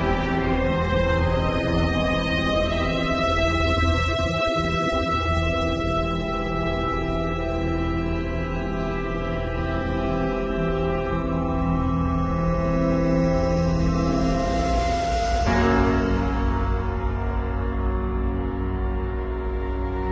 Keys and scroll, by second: 3.2 super+-, 4.0 super+-, 5.1 super+t, 6.9 Return, 7.5 super+[, 8.0 super+t, 11.7 shift+Return, 12.0 super+=, 12.9 super+space, 17.0 z, 17.8 b, 18.5 [, 19.8 x.